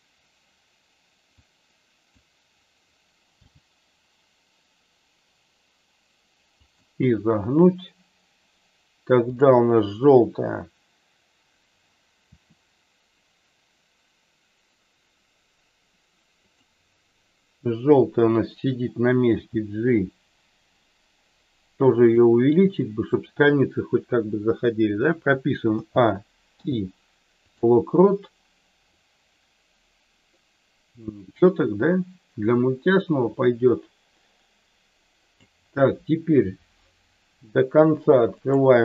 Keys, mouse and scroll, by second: 1.3 click, 3.4 g, 6.6 click, 9.3 click, 12.3 r, 16.5 click, 19.2 g, 21.9 click, 25.7 a, 26.6 i, 29.0-35.3 drag, 38.3 click.